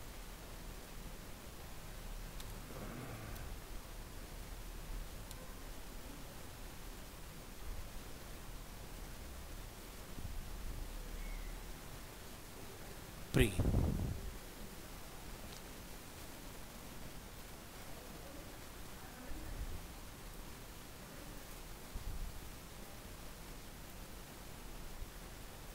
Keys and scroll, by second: 4.3 ctrl+x, 9.6 ctrl+s, 10.2 alt+Tab, 13.9 alt+Tab.